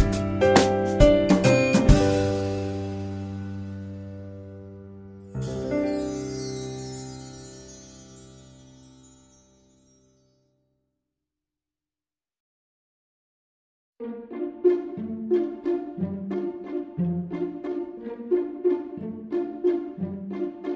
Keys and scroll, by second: 3.0 Tab, 5.1 Tab, 5.6 Tab, 7.5 ctrl+z, 8.8 4, 9.3 Return, 10.1 ctrl+z, 17.0 ctrl+z.